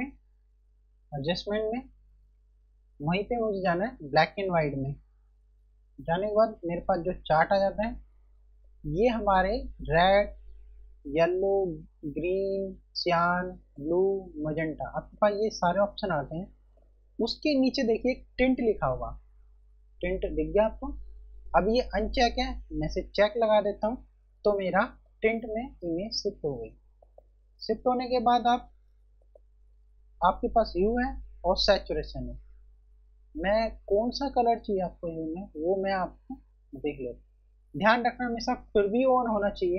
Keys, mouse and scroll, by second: 5.8 click, 6.2 F1, 7.0 click, 18.9 F1, 22.7 F1, 23.2 click, 25.2 click, 33.5 click, 38.0 F1.